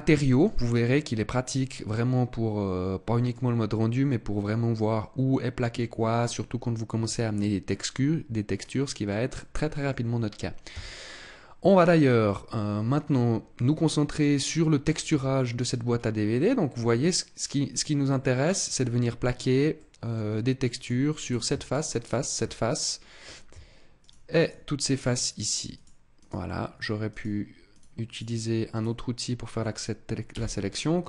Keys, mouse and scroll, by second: 0.5 middle click, 3.6-5.1 scroll up 1, 8.5 middle click, 9.2 middle click, 10.6 Tab, 12.1 middle click, 15.0 a, 15.7-16.2 scroll up 3, 16.2 middle click, 18.0 middle click, 19.7 middle click, 20.6 click, 21.1 right click, 21.5 shift+right click, 21.8 right click, 22.5 middle click, 23.8 shift+right click, 24.4 shift+right click, 24.6 shift+right click, 25.0 shift+right click, 25.6 shift+right click, 26.0 shift+right click, 27.0 shift+right click, 27.6 shift+right click, 28.0 shift+right click, 28.6 shift+right click, 30.2 c.